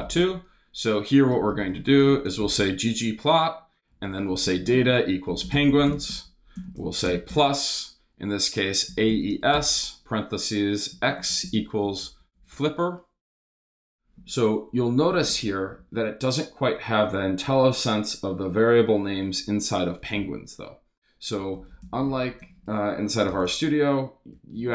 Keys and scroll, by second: 0.0-6.9 typing, 7.3 shift+Return, 8.1 Return, 8.3-14.1 typing, 15.8 shift+-, 21.1-23.3 typing, 24.3-24.7 typing.